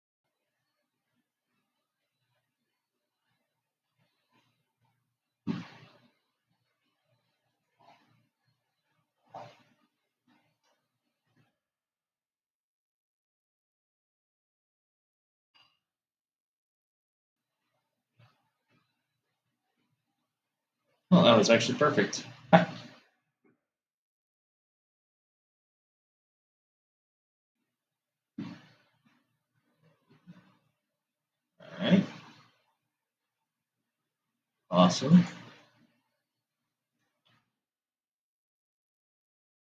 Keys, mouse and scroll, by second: 12.4 shift+d, 18.2-21.7 middle drag, 23.0 shift+d, 35.5 click, 37.9 shift+d.